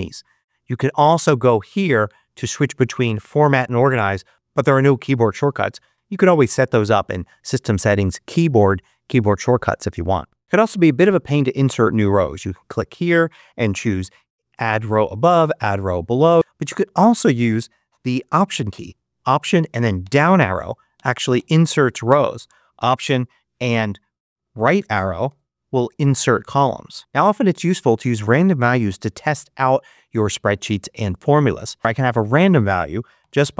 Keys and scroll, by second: 19.9 alt+Down, 25.2 alt+Right, 31.8 BackSpace, 33.1 =.